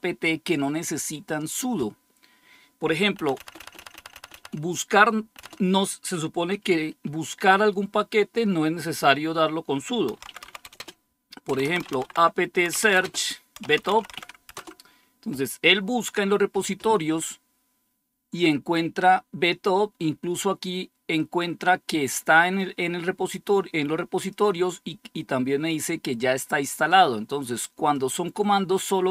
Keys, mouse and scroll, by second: 3.1-4.2 typing, 5.3 BackSpace, 9.8-14.5 typing, 21.0-24.2 drag, 26.8-28.5 drag.